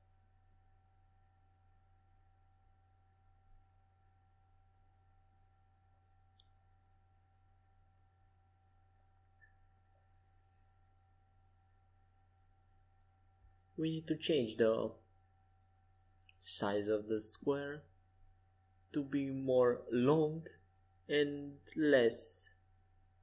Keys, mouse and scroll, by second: 6.2 z, 16.9 s, 23.1 s.